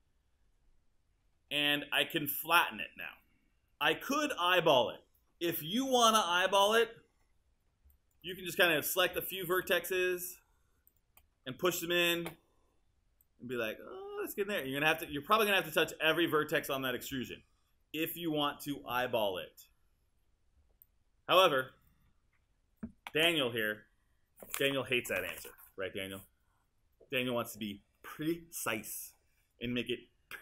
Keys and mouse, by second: 2.5 click, 11.9 w.